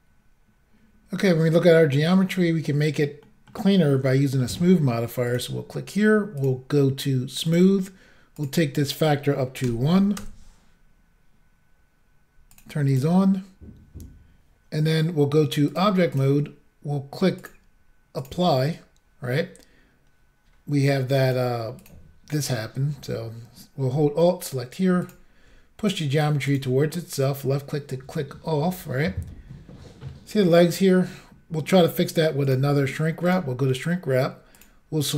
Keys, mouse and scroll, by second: 1.2-1.9 scroll down 3, 2.4 scroll up 1, 3.1 scroll down 1, 3.2 middle click, 4.1 shift+middle click, 4.4 middle click, 5.3 click, 5.3 click, 6.4 click, 6.4 click, 7.5 click, 7.5 click, 8.4 click, 8.4 click, 9.6 1, 10.2 Return, 12.5 click, 12.6 click, 12.9 click, 13.0 double click, 15.7 click, 15.8 click, 16.1 click, 17.4 double click, 17.5 double click, 18.2 click, 18.3 click, 21.2 click, 21.3 click, 21.8 click, 21.9 double click, 25.0 alt+click, 25.1 alt+click, 25.9 click, 26.5 click, 26.5 click, 26.9 middle click, 32.4 click, 32.5 click, 33.3 click, 33.3 click, 34.6 click, 34.6 click.